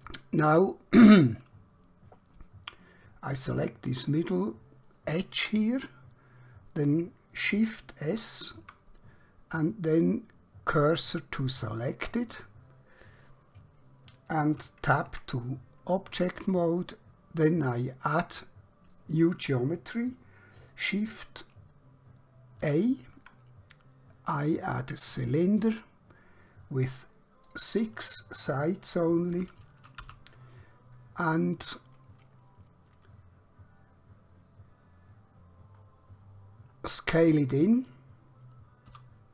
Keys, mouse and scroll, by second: 4.0 click, 5.7 middle click, 8.2 shift+s, 11.7 click, 15.2 Tab, 16.5 middle click, 22.6 shift+a, 25.7 click, 29.3 6, 30.1 Return, 35.1 scroll down 1, 37.1 scroll up 1, 38.9 s.